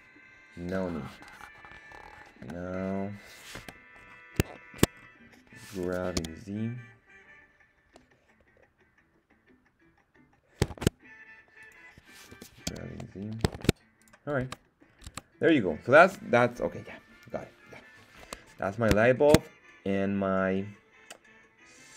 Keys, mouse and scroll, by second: 0.0 Tab, 2.2 scroll down 1, 2.4 /, 3.5 KP_1, 3.9-4.5 scroll down 3, 4.5 shift+middle drag, 4.9 scroll up 2, 5.8 g, 6.1 z, 10.7 shift+Tab, 11.6 click, 12.3 g, 12.6 z, 13.6 shift+Tab, 14.0 click, 14.4 Tab, 14.9 scroll down 2, 15.1 Tab, 18.4-18.9 scroll down 2, 19.0 shift+middle drag.